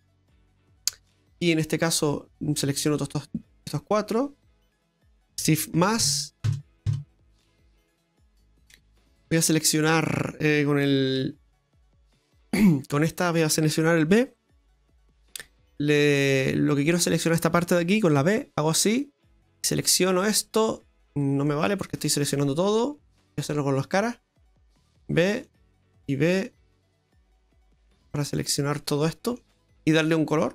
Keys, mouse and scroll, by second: 0.1 Tab, 0.6-1.3 scroll up 4, 1.3 scroll down 2, 2.3 right click, 2.9 shift+right click, 3.4 shift+right click, 4.0 shift+right click, 4.4 shift+right click, 4.8 shift+right click, 5.8 ctrl+KP_Add, 6.0 ctrl+KP_Add, 6.5 ctrl+KP_Add, 6.9 ctrl+KP_Add, 7.4 middle click, 7.4-7.9 scroll down 9, 8.3 shift+middle click, 8.5 shift+middle click, 8.6-8.9 scroll up 2, 8.9 middle click, 9.9 middle click, 11.2 KP_1, 11.7 KP_3, 16.2 click, 18.1 b, 19.5 middle click, 20.1 b, 21.2 scroll down 2, 21.4 middle click, 21.8 right click, 23.3 click, 23.9 b, 25.2 b, 26.2 b, 27.7 middle click.